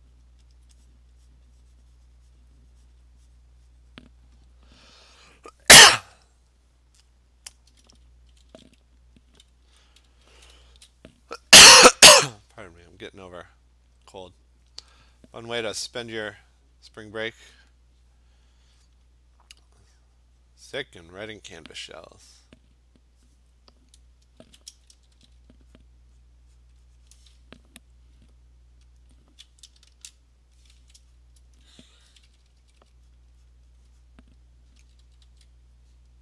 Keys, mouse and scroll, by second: 0.3 alt+click, 0.6 alt+click, 0.9 click, 1.3 click, 2.4 click, 2.9 click, 3.4 click, 4.1 click, 6.3 click, 7.1 click, 8.5 p, 9.7-10.8 typing, 11.0 click, 12.2 click, 12.8 click, 13.0 click, 13.9 click, 14.3 click, 14.7 click, 16.7 click, 17.0 click, 19.0 click, 19.2 click, 19.6 click, 20.0 click, 21.4 click, 24.5 ], 25.0 ], 25.2 ], 25.4 ], 25.9 click, 26.2 click, 26.7 click, 27.2 click, 29.0 alt+click, 29.5 alt+click, 30.0 $, 30.9 click, 31.3 click, 32.1-32.8 typing, 33.2 click, 33.5 click, 33.8 click, 34.1 click, 34.8 alt+click, 34.8 [, 35.1 [, 35.3 [, 35.7 click, 35.9 click.